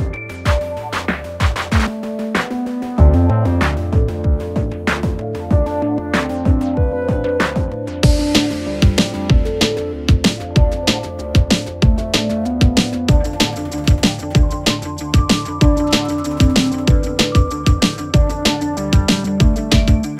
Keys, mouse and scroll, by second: 0.0-0.7 typing, 2.1-2.8 typing, 5.1-7.3 drag, 15.2 click, 16.8 z, 17.4-19.0 drag, 19.0 z, 19.7 alt+click.